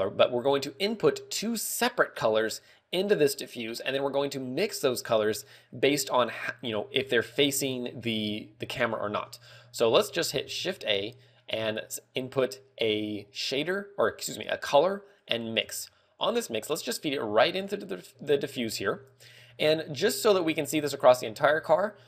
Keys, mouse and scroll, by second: 18.5 scroll, 20.7 scroll down 5, 21.0 scroll up 1, 21.8 scroll up 2, 21.9 scroll down 1.